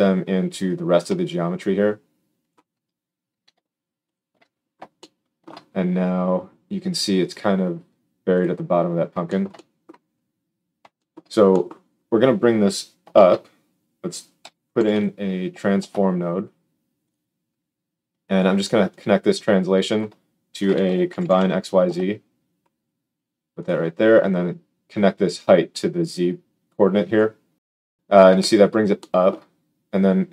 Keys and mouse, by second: 4.1 alt+shift+click, 4.6 click, 4.8 shift+middle click, 5.1 shift+click, 5.4-11.6 right drag, 11.6-18.9 drag, 13.1 shift+a, 23.8-25.3 drag, 28.8-30.3 shift+middle drag.